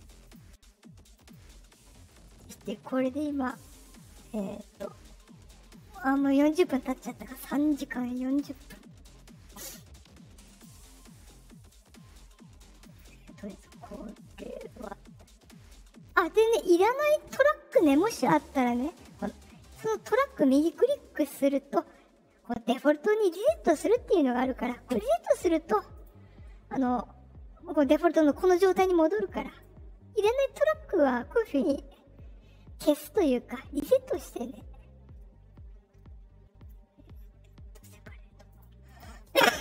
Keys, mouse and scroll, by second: 0.2 click, 1.1 click, 8.3 click, 10.4 click, 12.7 click, 14.6 right click, 16.0 click, 20.2 right click, 24.8 click, 25.9 click, 29.4 right click, 37.7 click, 38.4 click, 38.8 click.